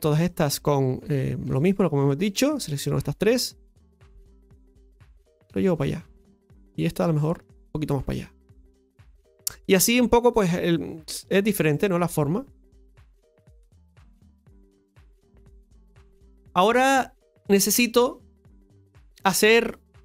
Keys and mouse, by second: 1.5 alt+shift+right click, 1.7 alt+shift+right click, 2.4 alt+shift+right click, 3.0 alt+shift+right click, 4.3-6.1 drag, 6.1 middle click, 6.9 right click, 7.3 alt+shift+right click, 8.3-9.7 drag, 9.7-11.6 middle drag, 12.7 click, 14.3 right click, 14.6 alt+shift+right click, 15.9 click.